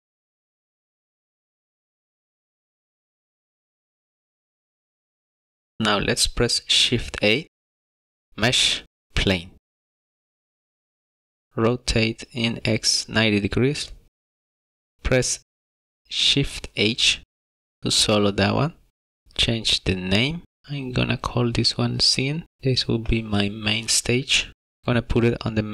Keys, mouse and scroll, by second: 0.0 shift+middle click, 0.1 scroll up 3, 0.3 middle click, 0.4 scroll down 1, 0.5 middle click, 6.6 shift+a, 12.1 click, 16.1 shift+h, 19.5 click, 19.6 click, 23.4 click.